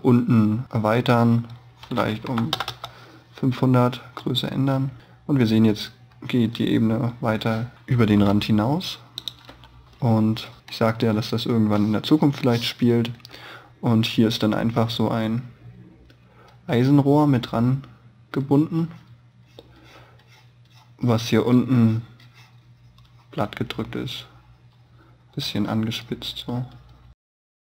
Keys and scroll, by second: 11.0 space.